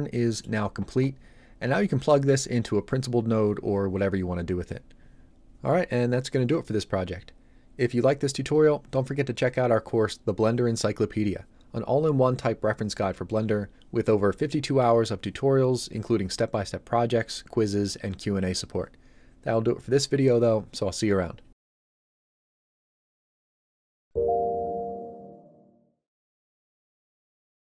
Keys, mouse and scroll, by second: 8.8 typing.